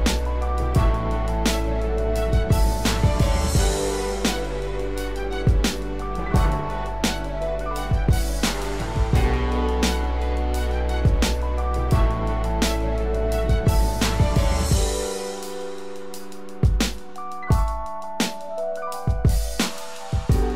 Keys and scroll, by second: 9.0 ctrl+z, 10.5 ctrl+alt+z.